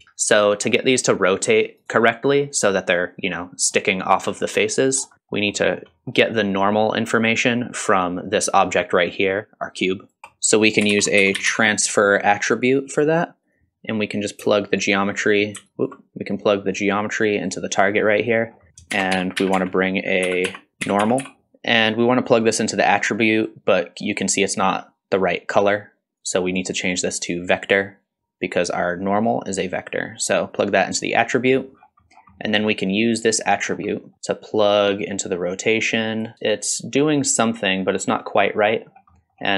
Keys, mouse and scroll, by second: 0.0 middle click, 1.1-2.1 drag, 3.4-3.7 middle drag, 4.4 middle drag, 4.9 scroll down 2, 5.1 middle click, 5.6 middle click, 5.9-6.4 scroll up 3, 6.8 click, 10.1 click, 10.2 x, 10.2 shift+a, 14.5-14.8 alt+right drag, 15.7 ctrl+right click, 16.8-17.5 drag, 17.8 click, 18.4 scroll up 2, 18.7 click, 18.7 middle click, 18.9 shift+a, 20.7 BackSpace, 21.5 middle click, 21.5 scroll up 1, 22.3-23.5 drag, 26.2-27.3 drag, 29.5-30.8 drag, 31.8-32.4 scroll down 4, 32.3 scroll up 1, 32.4 middle click, 33.2 middle click, 33.4 scroll down 1, 33.5 scroll up 1, 33.7 scroll down 1, 33.9 middle click, 34.6-36.2 drag, 36.3-37.9 middle drag, 38.9 scroll up 2, 39.2 middle click.